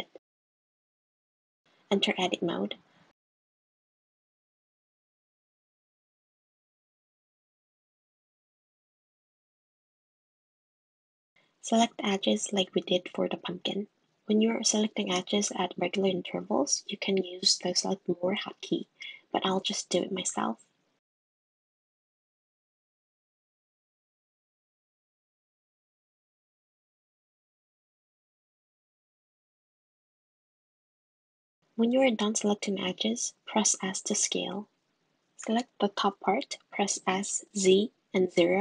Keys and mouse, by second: 1.4 Tab, 2.8 click, 2.9 click, 4.5 g, 5.9 g, 10.8 middle click, 12.8 middle click, 12.8 click, 14.1 click, 15.2 click, 15.4 click, 15.7 click, 15.9 click, 16.0 click, 16.4 click, 16.9 2, 17.0 click, 18.0 shift+click, 21.2 shift+click, 23.0-24.6 drag, 26.8 shift+middle click, 32.8 s, 36.1 1, 36.9 click, 38.1 s.